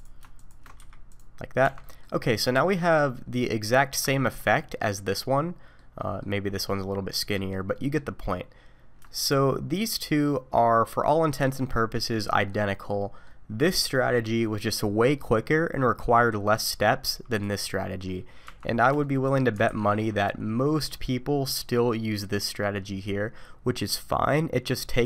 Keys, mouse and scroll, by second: 0.4 alt+click, 0.8 q, 1.6 Tab, 1.8 middle click, 2.3-3.1 scroll down 2, 2.6 middle click, 4.1 shift+middle click, 5.2 middle click, 6.0 middle click, 6.5 middle click, 7.2 middle click, 7.7 middle click, 8.3-9.0 scroll down 1, 9.0 shift+middle click, 12.5 middle click, 13.6 click, 17.3 click, 17.8 middle click, 18.4 Tab, 19.0 shift+middle click, 19.6 alt+a, 20.0 middle click.